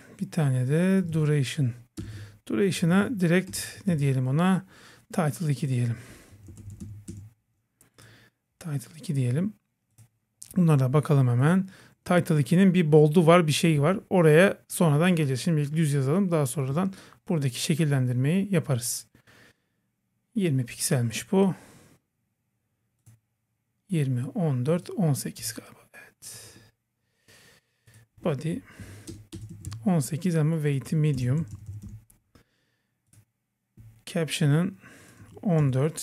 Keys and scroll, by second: 2.0 Return, 3.5 Return, 3.9 super+v, 28.8 Right.